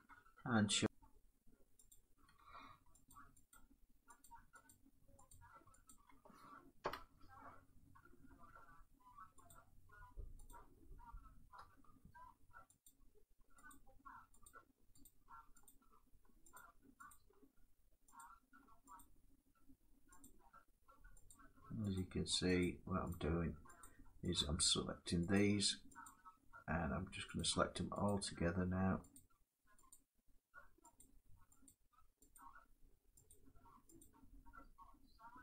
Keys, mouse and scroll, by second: 0.7 click, 1.6 click, 2.8 shift+click, 3.2 shift+click, 3.9 shift+click, 4.4 click, 5.0 click, 5.6 shift+click, 6.5 7, 9.2 shift+click, 10.2 shift+click, 12.0-14.7 shift+drag, 15.4 shift+click, 16.3 shift+click, 16.8 shift+click, 17.9 shift+click, 19.2-35.4 shift+drag.